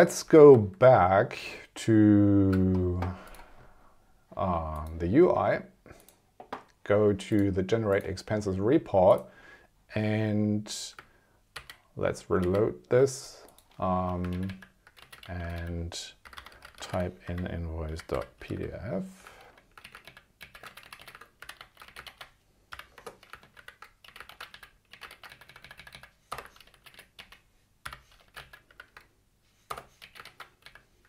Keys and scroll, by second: 0.5 super+Tab, 11.5 super+r, 14.3 super+Left, 15.1 Down, 15.2 super+Right, 15.7 Left, 17.8 ., 18.6 f, 19.4 super+Left, 19.8 Up, 20.1 super+Left, 20.7 shift+Down, 21.5 super+c, 21.6 super+Right, 21.9 Up, 22.1 super+Right, 22.7 ,, 23.0 Return, 23.4 super+Left, 23.6 super+v, 24.1 Up, 24.3 super+Right, 24.5 Left, 25.0 Up, 25.1 super+Right, 25.3 Left, 26.4 2, 26.8 Down, 27.2 Up, 28.0 ,, 28.3 Down, 28.4 super+Left, 28.7 super+v, 29.8 BackSpace, 30.0 Up, 30.2 super+Right, 30.6 Left.